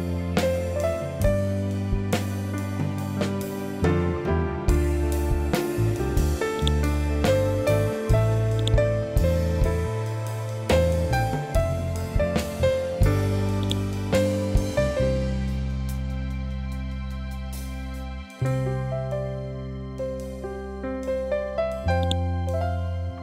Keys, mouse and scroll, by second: 2.0-2.4 typing, 2.9 Return, 6.5 right click, 8.5 click, 9.6 ctrl+v, 13.5 click, 16.5 Tab, 17.8-18.6 typing, 19.3 Return, 21.9 right click.